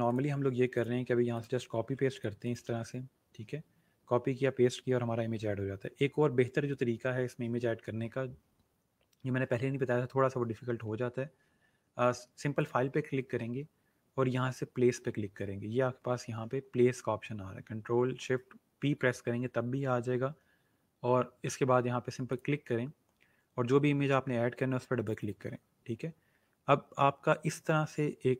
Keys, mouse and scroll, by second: 0.0 click, 1.7 ctrl+c, 2.0 click, 2.6 ctrl+v, 12.5 click, 22.3 click, 25.0 click.